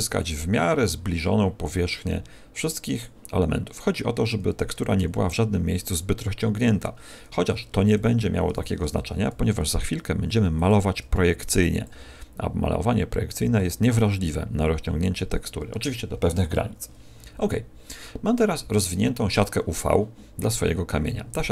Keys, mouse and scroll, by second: 2.9 click, 8.4 l, 9.6 g, 10.6 click, 10.9 s, 11.8 click, 15.1 click, 16.9 a.